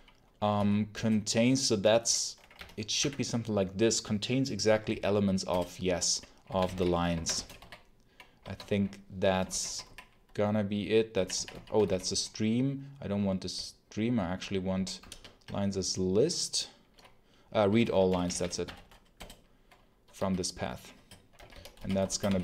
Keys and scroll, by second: 0.0-0.8 typing, 2.4 Down, 2.9 Up, 5.4 Return, 6.1-7.4 typing, 8.3 Escape, 8.6-10.0 typing, 11.0-12.2 typing, 13.4 w, 14.6 w, 14.8 space, 18.0 Down, 18.5 Down, 19.0 Return, 20.0-22.4 typing.